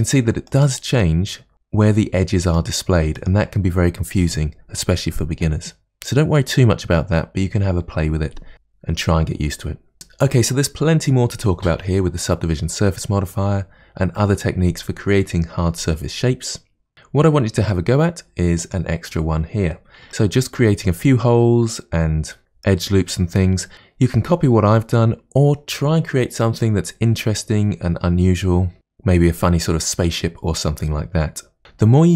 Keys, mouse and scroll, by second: 0.6 click, 2.7 click, 3.3 click, 16.9-18.7 scroll down 2, 18.7 click, 20.1-21.3 middle drag.